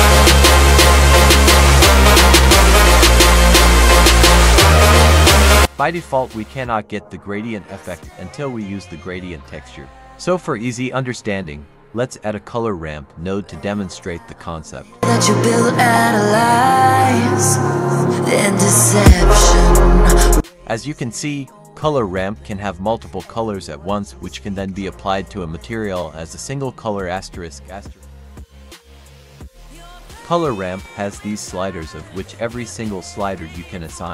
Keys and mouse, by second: 1.2 middle click, 11.1 click, 12.0 F3, 23.2-24.4 drag, 24.9 click, 26.1 click, 26.6-29.0 drag, 31.2-34.1 drag.